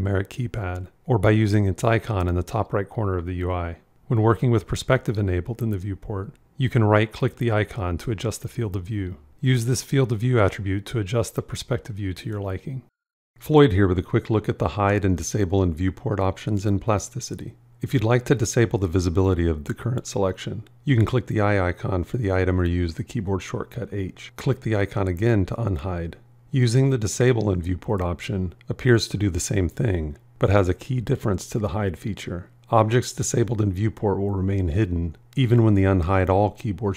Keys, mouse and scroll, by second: 23.2 h, 33.5 alt+h.